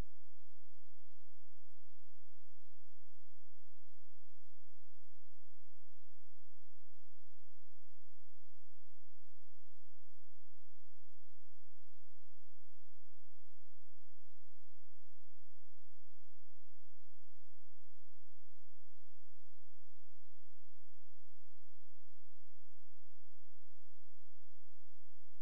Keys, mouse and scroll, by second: 0.1 F12, 0.8 click, 10.8 F12, 11.8 click, 16.6 ctrl+right click, 17.7-18.0 scroll down 1, 18.0 scroll, 18.1-19.6 scroll up 1, 19.6 click.